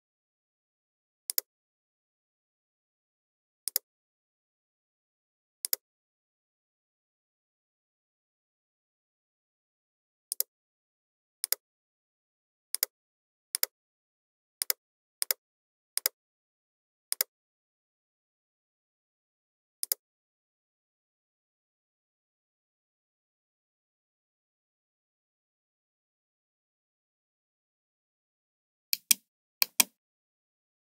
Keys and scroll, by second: 27.6 ctrl+j.